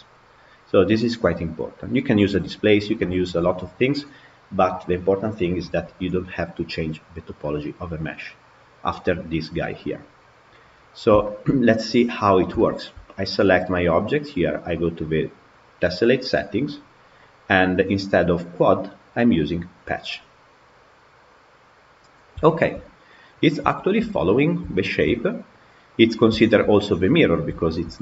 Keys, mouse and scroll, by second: 10.8-11.1 scroll down 4, 11.1-11.4 shift+middle drag, 11.4-11.8 scroll up 2, 11.8 click, 12.4-12.8 shift+middle drag, 12.8-14.5 scroll up 5, 14.6 click, 16.0-16.8 scroll down 4, 16.8-19.9 scroll down 2, 21.2 click, 22.3 shift+middle click, 22.6-23.0 scroll down 3, 23.0-25.2 middle drag, 25.2 scroll up 1, 25.5 scroll down 1, 25.5-26.1 middle drag, 26.1-26.8 scroll down 3, 26.3 shift+middle drag, 27.4-28.0 shift+middle drag.